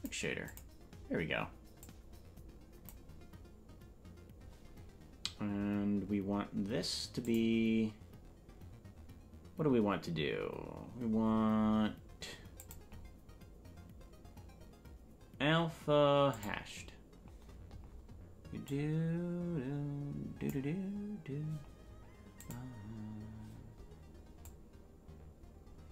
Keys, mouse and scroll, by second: 1.9-3.0 drag, 7.2 click, 11.2-12.6 scroll down 2, 12.6-16.6 drag, 12.6-16.6 scroll down 7, 18.7-20.5 drag, 22.5-25.9 drag.